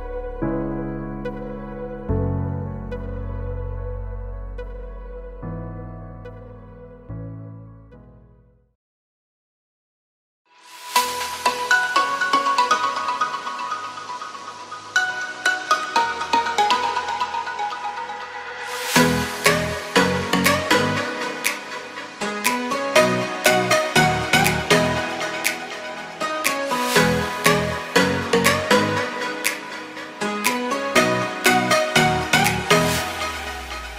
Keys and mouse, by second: 0.0-1.8 drag, 2.5 2, 3.2 ctrl+e, 4.4 a, 5.1 Tab, 5.6 Tab, 6.5 click, 7.6-8.1 drag, 8.0 Tab, 8.3 shift+click, 8.6-9.0 drag, 9.1 shift+click, 9.6 Tab, 10.0 a, 12.3 s, 15.2-16.4 drag, 16.4 s, 17.6-19.0 drag, 19.1 Tab, 19.6 a, 19.7 ctrl+s, 19.8-22.5 drag, 23.5-24.1 drag, 24.1-25.7 middle drag, 26.5-27.1 middle drag, 27.9 KP_Divide, 29.4-30.4 drag, 30.5 Tab, 30.7-32.0 drag, 32.3 1, 32.8 g.